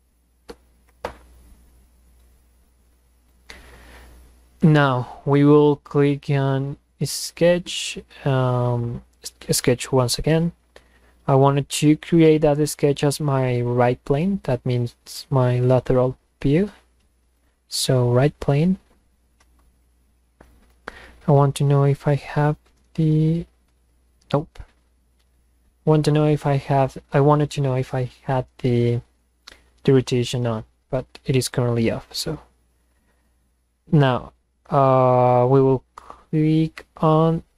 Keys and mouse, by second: 9.2 click, 17.4 click.